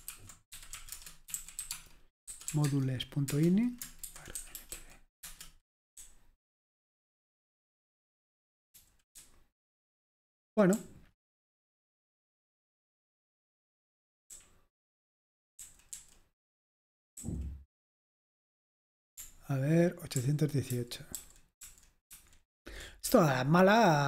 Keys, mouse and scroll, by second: 0.1-3.0 typing, 3.3 Return, 4.2-7.0 typing, 12.9 typing, 14.3-17.2 typing, 20.2 ctrl+u, 20.8 ctrl+u, 21.2 ctrl+u, 21.7 ctrl+u, 23.1-24.0 typing.